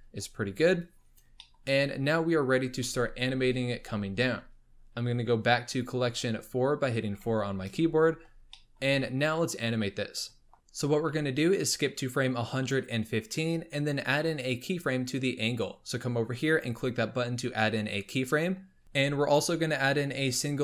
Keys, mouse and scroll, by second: 1.4-1.7 shift+middle drag, 1.7-3.3 scroll up 3, 7.1 4, 7.9-8.4 scroll up 2, 8.5-10.5 shift+middle drag, 11.5 click, 16.4 click, 18.8-19.5 shift+middle drag.